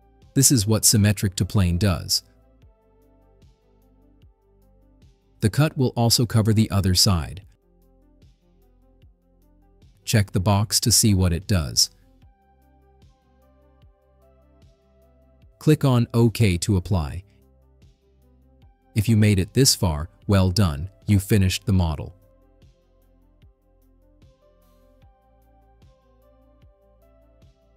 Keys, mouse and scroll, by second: 2.3-3.1 drag, 3.5 scroll up 2, 3.8 middle click, 4.8-5.3 right drag, 12.6 click, 16.6 click, 17.7-18.4 scroll down 5, 18.7 right click, 19.2-25.1 drag, 25.4 middle click, 25.8 right click.